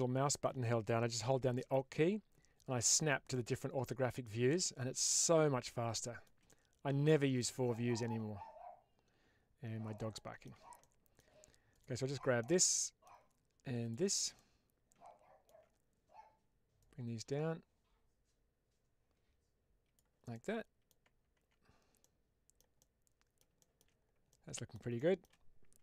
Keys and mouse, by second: 3.2-4.2 middle drag, 4.3-5.6 middle drag, 6.0 shift+middle drag, 6.3-7.3 middle drag, 7.6-10.4 middle drag, 10.8-11.1 shift+middle drag, 11.6 click, 12.3-12.9 middle drag, 14.2-15.5 middle drag, 16.7-19.9 drag, 20.2 middle click, 21.2 Tab, 21.9 middle click, 22.7 middle click, 23.5 shift+middle click, 24.2 middle click, 25.0 shift+middle click.